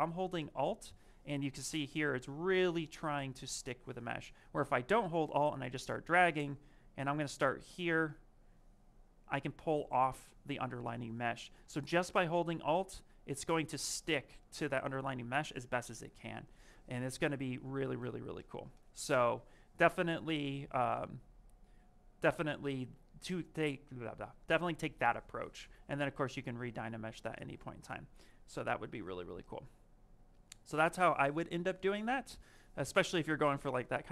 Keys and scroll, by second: 6.6 ctrl+z, 7.6 ctrl+shift+z, 11.5 ctrl+z.